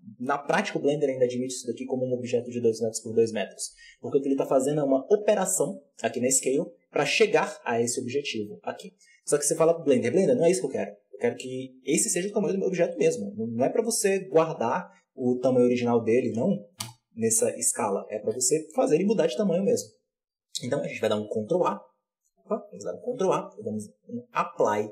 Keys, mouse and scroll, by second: 15.4-18.0 drag, 18.0 ctrl+z, 21.2 ctrl+q, 22.8 ctrl+a.